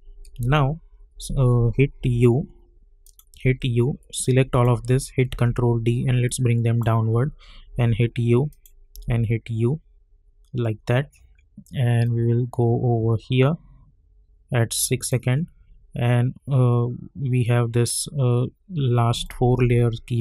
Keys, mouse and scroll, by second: 1.2-2.0 typing, 3.0 click, 3.4 u, 4.2 click, 5.2 ctrl+d, 6.2-7.7 drag, 7.7 u, 8.5 click, 8.9 u, 9.5 scroll down 1, 10.4 scroll up 1, 12.0-15.8 drag, 15.8-16.4 scroll down 2, 16.7 scroll up 1, 18.1-19.1 scroll down 1, 19.1-20.2 drag.